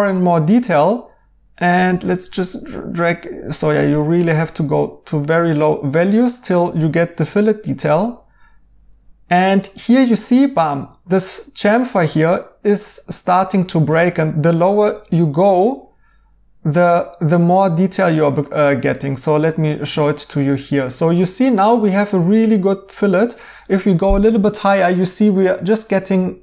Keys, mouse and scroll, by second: 17.6 right click.